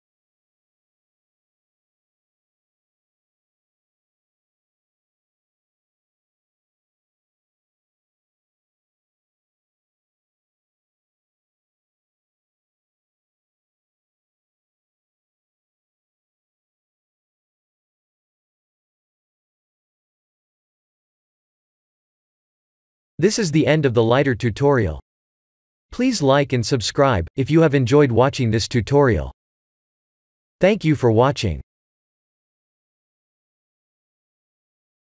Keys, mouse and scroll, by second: 3.7 click, 4.5 click, 5.5 click, 7.5 click, 16.1 click.